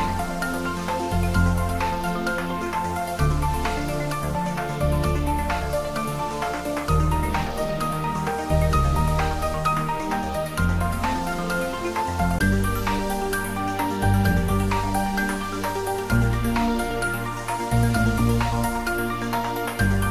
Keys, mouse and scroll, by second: 3.9 click, 4.1 click.